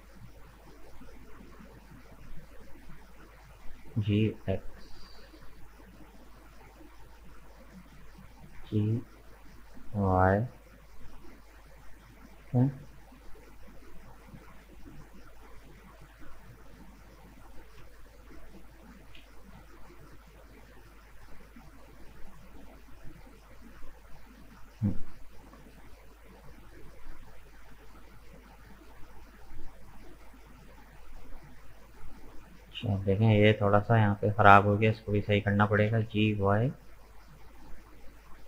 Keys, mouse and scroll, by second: 2.3 right click, 3.7 g, 7.6 shift+right click, 8.6 g, 11.0-16.9 middle drag, 16.9 right click, 17.3 scroll down 2, 18.3 shift+right click, 19.0 shift+right click, 19.4-23.1 shift+middle drag, 23.1 right click, 23.5-23.9 scroll up 2, 23.9-24.9 middle drag, 24.9-25.2 scroll down 2, 25.2-27.9 middle drag, 27.9-28.5 scroll up 1, 28.5 shift+middle click, 29.0-29.3 scroll up 2, 29.3-34.6 middle drag, 34.6 right click, 34.9 middle click, 35.8 g.